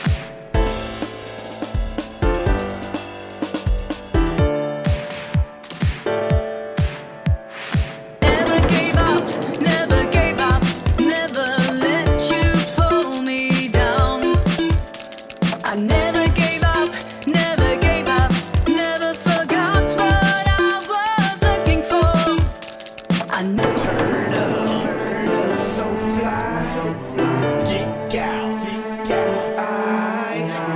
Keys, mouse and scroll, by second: 0.2 scroll up 1, 0.9 scroll up 1, 5.2 click, 6.2 click, 9.1 click, 10.4 shift+click, 11.3 shift+click, 15.7 drag, 16.6 click, 17.7 click, 17.8 click, 18.2 click, 18.8 click, 21.1 click, 21.5 click, 22.3 click, 23.4 click, 25.6-27.4 typing, 27.6 Return.